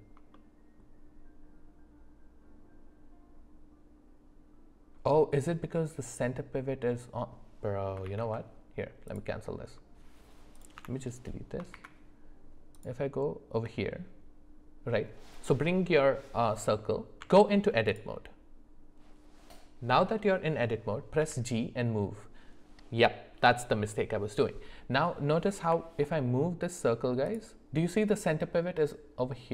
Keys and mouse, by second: 0.3 shift+middle click, 8.1 ctrl+z, 9.1-10.6 drag, 10.8 Delete, 11.7 shift+a, 17.2 Tab, 21.2 g.